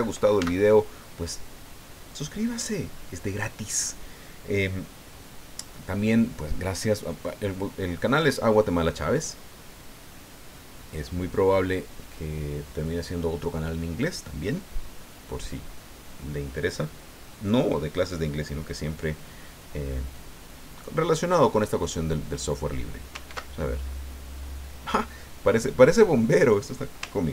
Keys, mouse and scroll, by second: 0.4 Tab, 23.3 ctrl+2.